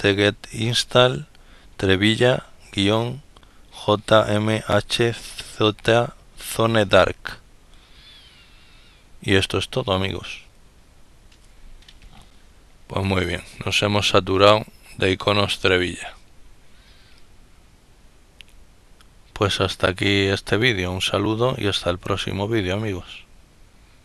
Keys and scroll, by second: 13.0 ctrl+-, 13.8 ctrl+-.